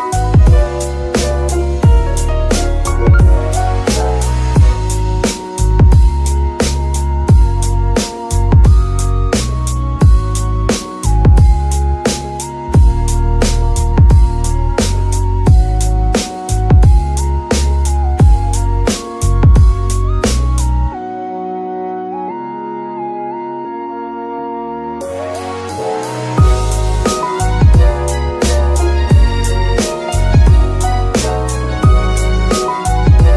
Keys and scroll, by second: 4.9 alt+g, 5.6 alt+g, 6.8 g, 8.9 Escape, 9.2 g, 10.5 g, 11.8 Escape, 12.3 g, 15.0 Escape, 16.9 Escape, 19.5 g, 20.9 Escape, 25.1 r, 29.4 End, 30.9 d.